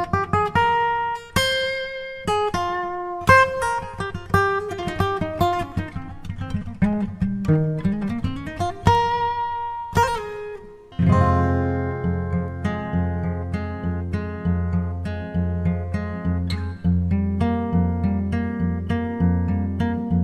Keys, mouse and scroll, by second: 3.5-7.7 drag, 12.0-13.6 drag.